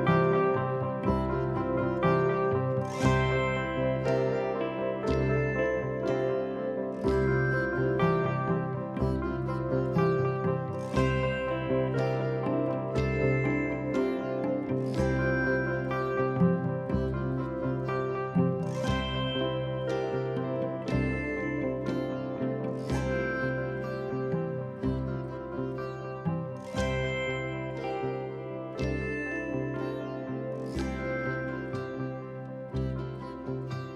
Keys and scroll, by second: 1.2 4, 3.1 3, 7.4 4, 8.7 2, 10.8 4, 12.5 2, 17.1 ctrl+d, 17.2 Escape, 27.9 ], 28.8 4, 30.7 ], 31.4 Escape.